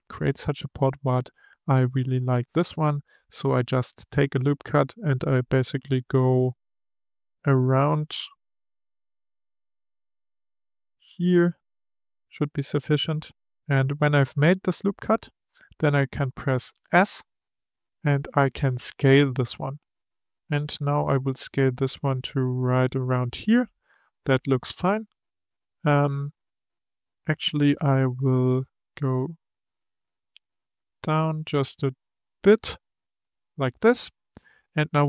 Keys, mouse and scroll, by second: 2.0-7.1 drag, 16.7 s, 28.4-30.0 drag.